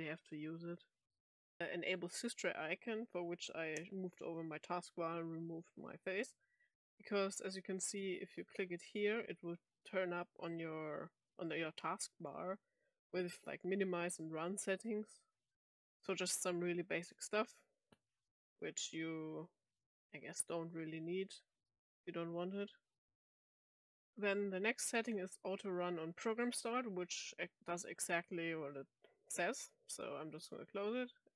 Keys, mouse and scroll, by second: 1.4 click, 8.6 click, 22.3 click, 23.7 click, 27.0 click, 28.7 click, 30.1 click.